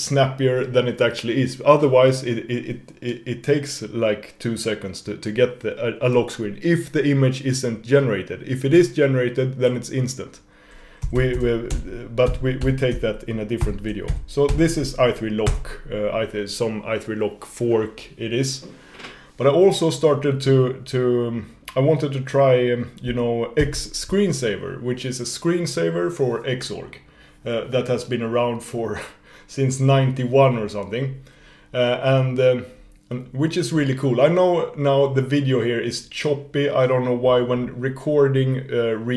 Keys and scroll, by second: 23.6 shift+super+x.